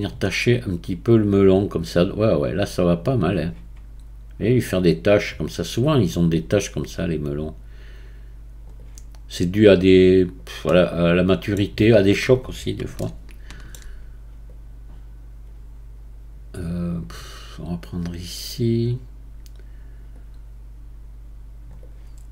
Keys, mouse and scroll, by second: 0.2-7.0 right drag, 7.4-8.8 drag, 8.8-10.7 right drag, 10.7-14.5 middle drag, 14.5-18.4 right drag, 20.1-21.8 drag, 21.8-22.3 right drag.